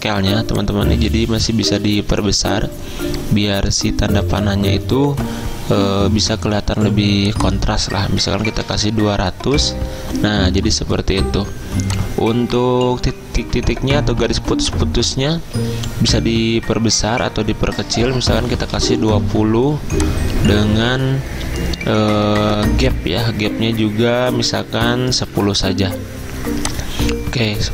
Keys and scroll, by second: 8.2-9.2 typing, 9.6 Return, 18.4-19.3 typing, 25.1-26.0 typing.